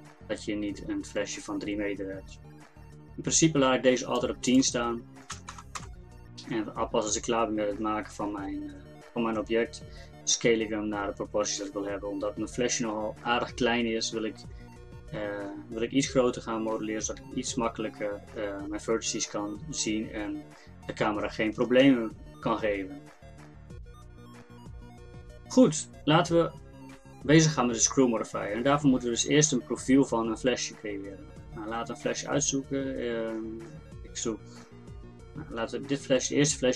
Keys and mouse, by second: 4.5-6.5 drag.